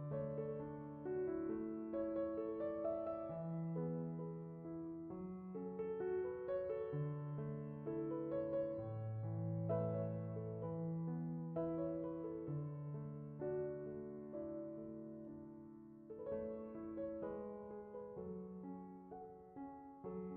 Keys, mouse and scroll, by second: 1.2 Left, 3.5 Left, 8.2-11.3 drag, 15.8-18.7 drag, 18.7-20.3 middle drag.